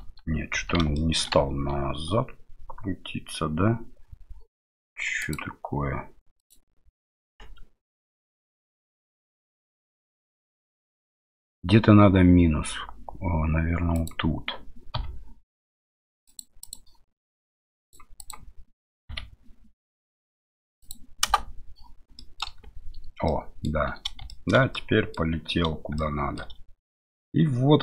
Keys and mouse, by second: 0.9 middle click, 5.2-16.4 drag, 16.6 click, 17.8-21.4 drag, 22.2 middle click, 22.6 space, 23.3 middle click, 24.3 shift+middle click, 24.7 middle click, 26.0 shift+middle click, 27.1 middle click.